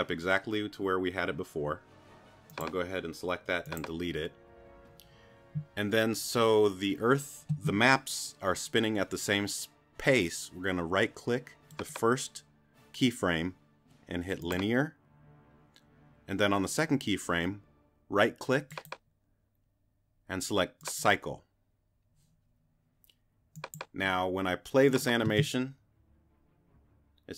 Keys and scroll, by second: 25.3 space.